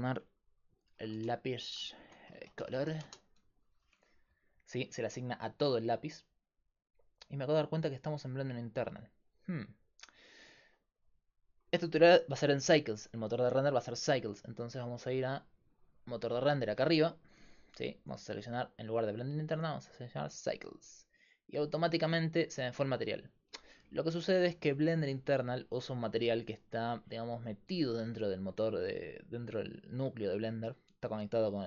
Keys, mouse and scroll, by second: 1.1-10.5 drag, 14.8-16.6 drag, 18.5-20.2 drag, 24.8-26.5 right drag.